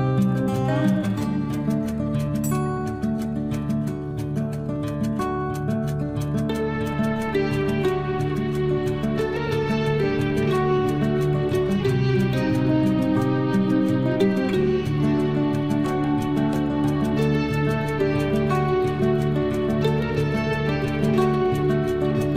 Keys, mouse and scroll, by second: 0.9 space, 1.3 scroll down 1, 3.5 click, 4.5 Delete, 5.3 click, 5.6 Delete, 5.9-7.7 scroll down 1, 7.7 click, 10.1 Escape, 10.6 space, 11.3 click, 11.4-16.6 drag, 20.2-20.7 shift+scroll up 1, 21.9 shift+click.